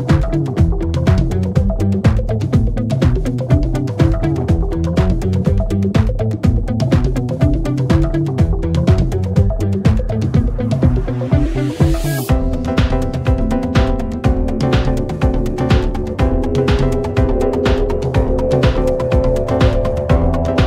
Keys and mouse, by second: 11.8 middle click.